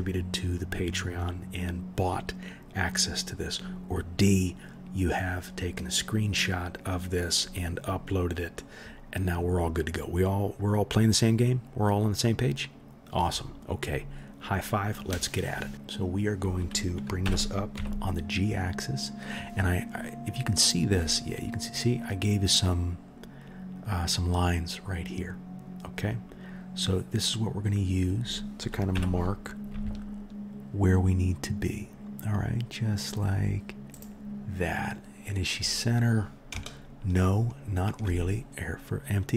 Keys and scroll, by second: 17.2 g, 28.9 g.